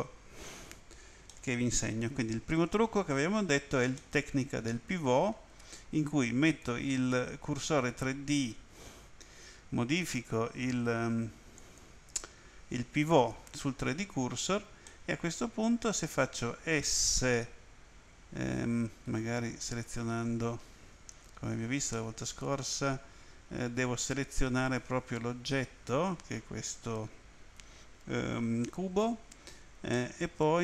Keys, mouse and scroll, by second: 1.3 middle click, 4.0 middle click, 6.5 click, 11.6 click, 13.1 click, 14.8 middle click, 17.2 s, 19.1 right click, 23.6 right click, 29.9 middle click.